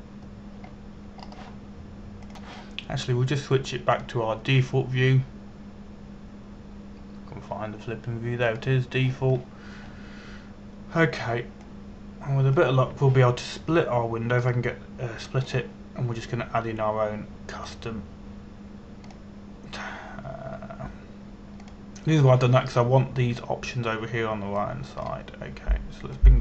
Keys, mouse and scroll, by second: 2.4-2.9 scroll down 1, 2.9-3.9 scroll up 1, 3.9 click, 11.4-12.2 scroll down 1, 13.3 click, 16.0 right click, 17.1 click.